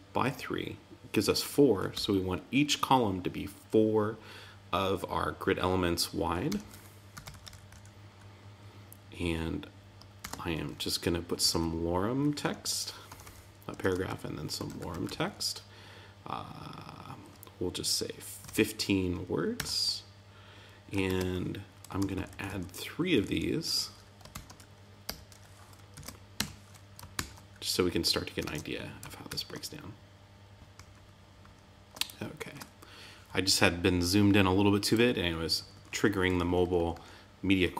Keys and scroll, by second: 10.2 shift+>, 19.5 Tab, 21.0 super+z, 21.9 alt+Left, 23.1 alt+Right, 25.9 super+Right, 26.3 Tab, 27.1 super+s, 28.4 super+Tab, 29.2 super+r, 30.7 super+-, 32.4 super+=, 35.1 super+=, 36.2 super+-.